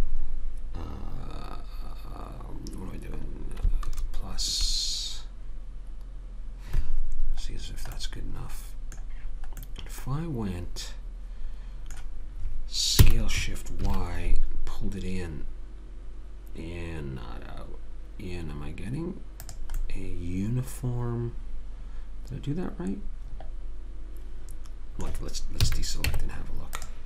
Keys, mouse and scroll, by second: 7.6 middle click, 8.3-10.8 middle drag, 13.0 s, 19.8-21.0 middle drag, 21.2 middle click, 25.6 a, 26.1 Tab.